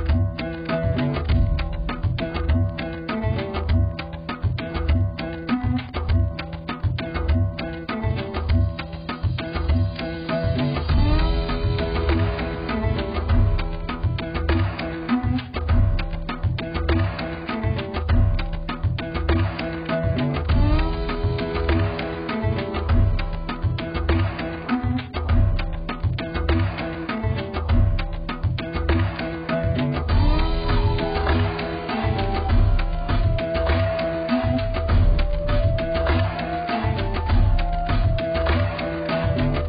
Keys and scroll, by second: 3.6 x, 10.4 x, 21.4 x, 30.7 x.